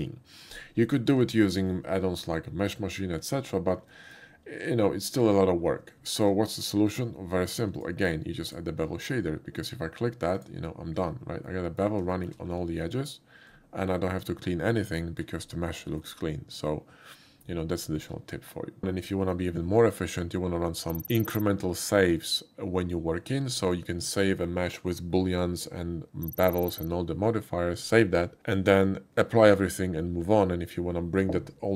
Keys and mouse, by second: 1.3 shift+middle drag, 2.3-2.9 middle drag, 3.9 shift+middle drag, 6.1 shift+middle click, 6.9 shift+click, 7.8 shift+click, 8.4 shift+click, 10.4 click, 11.4 middle click, 12.1 shift+middle click, 13.8-15.2 shift+middle drag, 15.8 shift+middle drag, 26.2 typing.